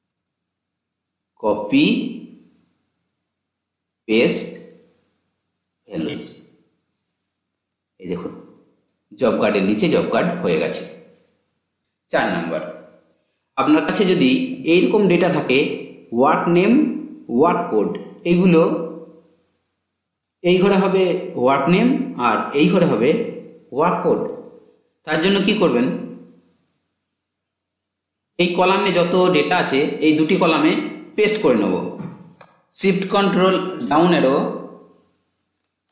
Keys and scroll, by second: 32.8 ctrl+shift+Down.